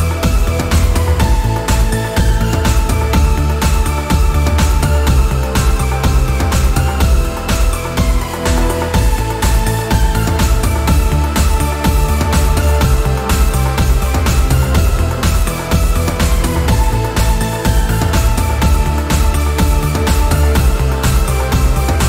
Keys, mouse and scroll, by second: 9.0-9.7 scroll up 1, 9.7-10.1 scroll down 1, 10.4 click, 14.5-14.9 scroll up 1, 17.5-22.0 drag.